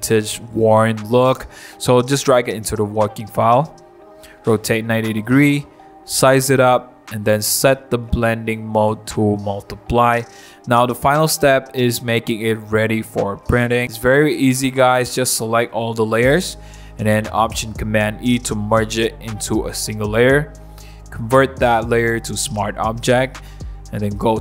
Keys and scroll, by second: 0.7 super+v, 2.0 super+t, 7.0 Return, 11.5-11.9 typing, 23.6 super+0.